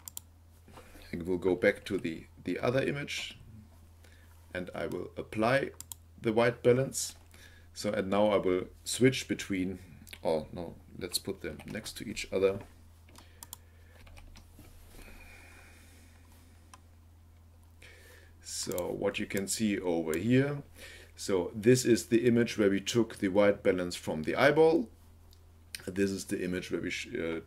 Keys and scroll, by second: 1.8 Right, 11.4 ctrl+b, 14.0 ctrl+b.